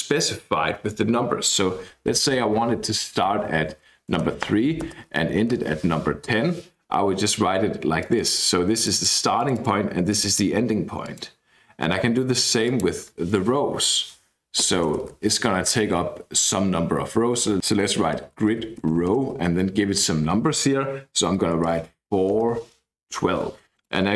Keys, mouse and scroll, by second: 3.3-6.0 typing, 8.0-10.9 drag, 11.0 click, 12.6 click, 14.6 shift+;, 14.8 shift+space, 17.2-19.4 typing, 21.3-22.5 typing, 23.7 click.